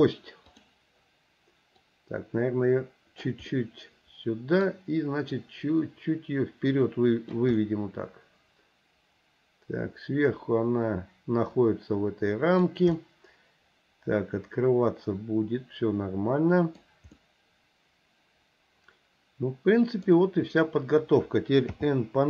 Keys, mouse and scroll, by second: 0.5 click, 1.9-3.4 drag, 3.5-4.6 middle drag, 5.4-7.4 drag, 7.6-12.7 middle drag, 13.0-16.9 middle drag, 17.1-20.1 middle drag, 21.7 n.